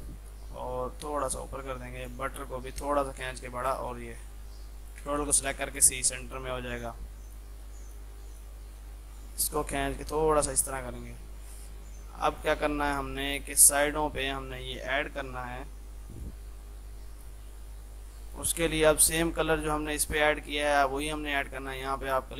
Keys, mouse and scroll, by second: 3.8 c, 4.2 F3, 4.9 shift+click, 5.3 c, 5.8 click, 6.0 F3, 6.3-11.5 drag, 11.5 F3, 12.3-16.2 drag, 16.5 F2, 16.7-18.3 drag, 19.1 ctrl+z, 19.8 click, 20.2 ctrl+z, 21.0 click.